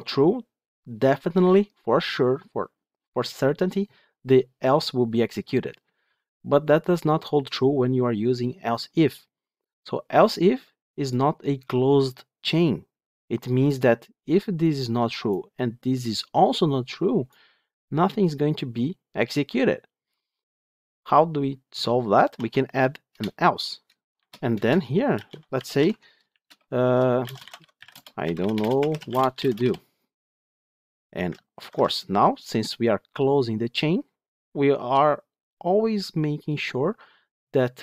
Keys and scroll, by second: 23.0 Return, 29.7 Tab, 31.5 ctrl+shift+F10.